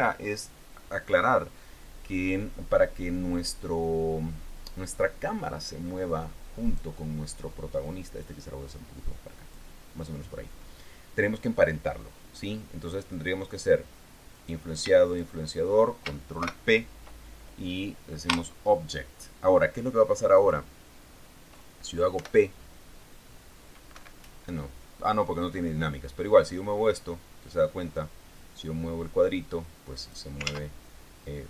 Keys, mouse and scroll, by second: 7.0 right click, 8.2-10.1 drag, 14.7 right click, 15.5 shift+right click, 16.8 ctrl+shift+p, 18.6 Return, 20.7 right click, 22.5 p, 24.3 Escape, 27.2-30.6 drag, 30.8 ctrl+z.